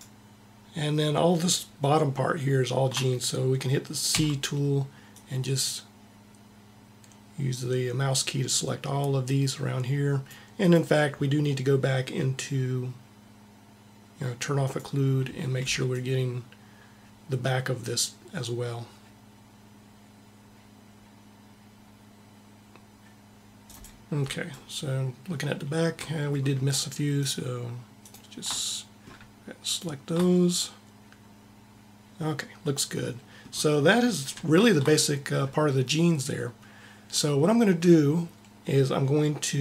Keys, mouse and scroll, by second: 4.0 c, 5.0 c, 14.7-16.2 drag, 15.5 c, 24.0-25.9 middle drag, 26.2 middle click, 27.0-28.6 drag, 34.7-39.2 middle drag.